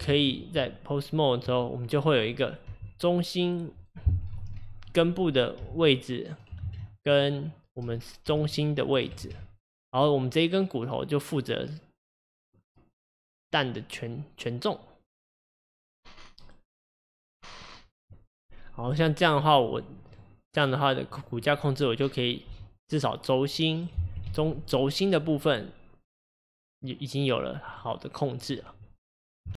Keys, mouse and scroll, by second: 0.2 ctrl+z, 0.6 Tab, 1.9 click, 2.7 g, 4.4 ctrl+z, 4.9 click, 5.7 g, 6.7 ctrl+z, 7.0 click, 8.3 r, 9.3 ctrl+z, 9.7 click, 19.7 click, 20.1 drag, 20.5 click, 21.2 click, 22.5 g, 24.4 ctrl+z, 24.6 click, 25.3 click, 26.0 click, 26.7 click, 27.7 click, 28.4 click.